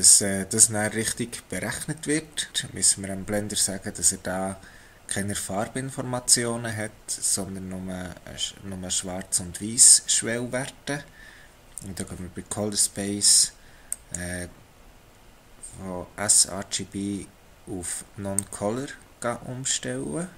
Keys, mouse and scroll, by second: 13.9 click.